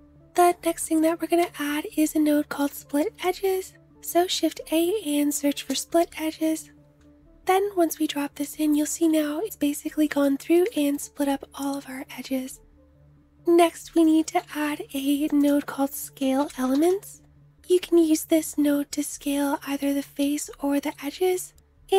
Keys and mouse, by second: 0.9 shift+a, 7.4-8.2 drag, 8.2-9.1 middle drag, 9.1-10.0 drag, 10.0 shift+middle click, 10.3-12.4 drag, 12.4-13.5 middle drag, 13.6 shift+click, 13.6 shift+a, 16.6-21.9 drag, 16.6-21.9 middle drag, 16.6-21.9 right drag.